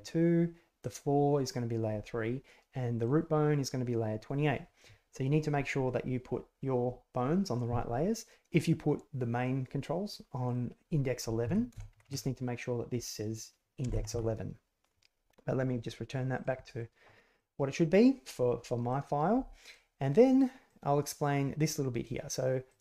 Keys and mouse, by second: 0.7 click, 2.9 click, 8.5 click, 10.4 click, 16.3 click, 17.3-18.3 middle drag, 18.9 middle click, 20.6 click, 21.2 click, 22.6 click.